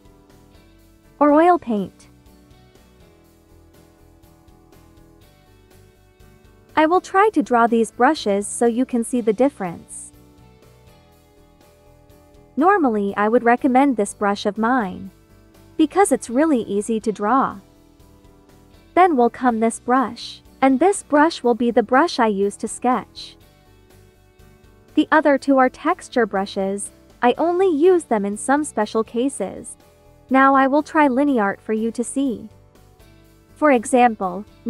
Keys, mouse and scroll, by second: 2.2 ctrl+z, 2.4 ctrl+click, 3.0 ctrl+z, 3.3 click, 5.6 space, 5.8 click, 6.1 space, 11.4 space, 11.6 click, 12.0 space, 13.5-21.8 drag, 21.8-26.2 drag, 30.1-32.5 typing, 31.1 click, 32.1 click, 33.7 click.